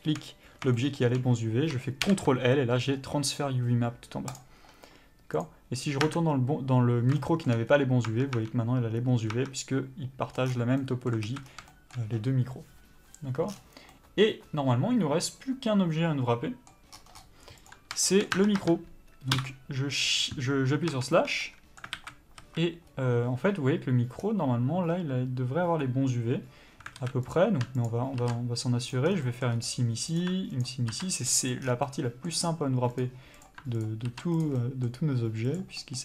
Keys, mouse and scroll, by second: 0.7 shift+middle click, 5.4 click, 6.0 Tab, 7.1 shift+middle click, 7.6-8.0 scroll up 1, 8.0 Tab, 10.2 scroll down 1, 10.3 scroll up 1, 10.4 scroll down 1, 10.7 middle click, 11.2 alt+a, 11.4 scroll down 1, 11.6 shift+middle click, 13.4 scroll down 1, 13.9 middle click, 16.9 scroll up 1, 17.6 click, 18.0 shift+middle click, 18.3 Tab, 19.3 KP_Divide, 20.9 Tab, 21.4 middle click, 21.9 alt+a, 22.8-23.2 scroll up 1, 24.2-26.9 scroll down 1, 26.9 alt+a, 27.2 click, 27.8 ctrl+click, 28.9 ctrl+e, 29.0 scroll down 1, 29.2 middle click, 29.5-30.0 scroll up 1, 30.0 click, 30.6 ctrl+click, 31.5 ctrl+e, 31.6 scroll down 1, 31.8 middle click, 32.4-32.9 scroll up 1, 32.9 click, 33.7 ctrl+click, 34.4 ctrl+e, 34.5 middle click, 35.4 click, 35.7 middle click.